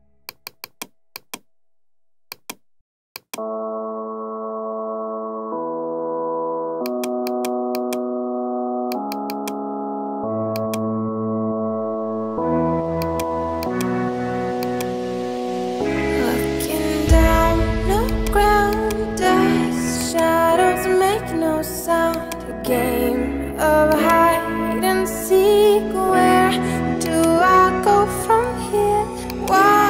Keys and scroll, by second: 21.0 Right.